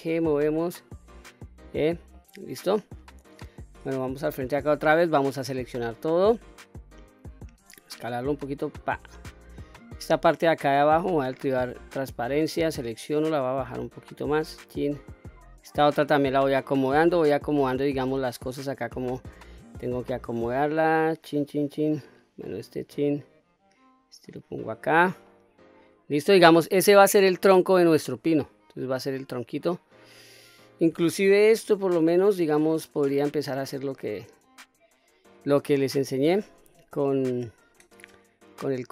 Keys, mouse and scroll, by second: 0.9 click, 1.7-2.1 scroll down 1, 2.1-3.8 middle drag, 4.2 KP_1, 5.5 l, 7.6 s, 9.1 click, 9.8 click, 11.1 q, 11.9 click, 13.2-14.9 drag, 15.4 click, 16.9 click, 18.4 click, 20.1-21.9 drag, 22.5 click, 24.0 click, 25.3 middle click, 26.2-27.6 scroll down 1, 27.6 middle click, 28.4 q, 28.7 scroll up 2, 29.3-31.0 middle drag, 31.3 KP_1, 31.8-32.6 scroll up 1, 34.4 ctrl+right click, 36.3 s, 37.4 click.